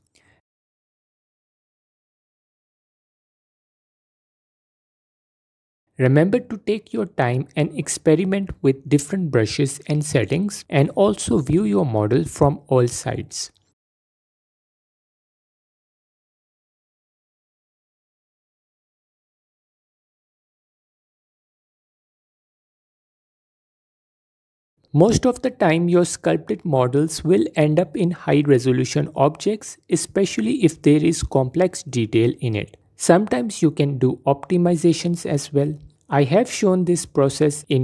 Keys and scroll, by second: 0.0 f, 1.6 f, 2.6 g, 3.1 f, 3.4 f, 5.3 f, 5.6 f, 6.3 f, 7.4 f, 8.2 f, 9.0 f, 11.5 f, 11.9 f, 12.5 f, 14.0 f, 15.3 ctrl+z, 15.4-17.5 typing, 19.2 Tab, 22.4 Tab, 22.5 f, 24.4 Tab, 28.4 F4.